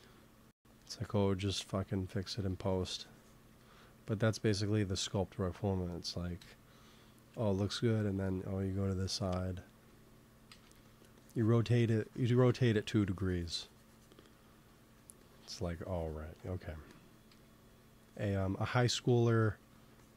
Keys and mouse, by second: 0.9 middle click, 1.4 x, 1.9-4.6 drag, 2.0 shift+c, 2.3 f, 6.3 KP_1, 7.2 KP_3, 10.4 shift+c, 10.6 f, 11.1-14.8 drag, 14.8 middle click, 15.1-16.9 drag, 16.3 x, 16.7 f, 17.2 f, 18.0-19.2 drag, 18.9 ctrl+z, 19.5 f.